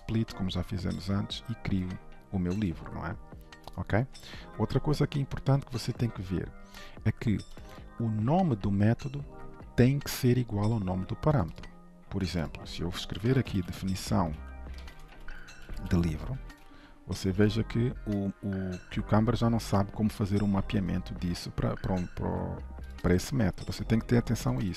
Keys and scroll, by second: 16.6 ctrl+s, 23.6 ctrl+z.